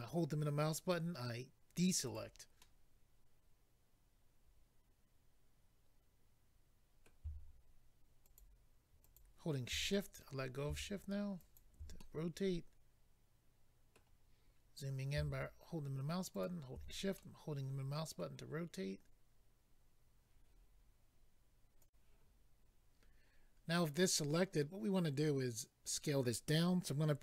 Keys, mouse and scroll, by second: 2.0 right click, 2.1 right click, 2.6 middle click, 8.2 shift+click, 9.0 shift+click, 9.9 middle click, 11.4 shift+click, 12.0 middle click, 14.4-15.2 scroll up 2, 16.3 shift+click, 17.2 middle click, 21.8 click, 21.9 click, 22.9-23.4 scroll down 2, 23.4-24.1 scroll down 2, 24.1 middle click.